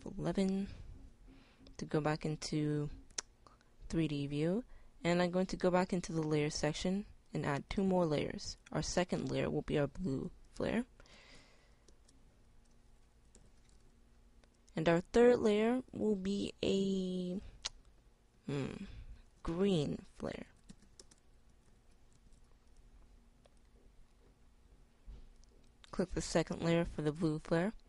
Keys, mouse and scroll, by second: 0.0 F11, 6.1-11.6 middle drag, 21.3 e.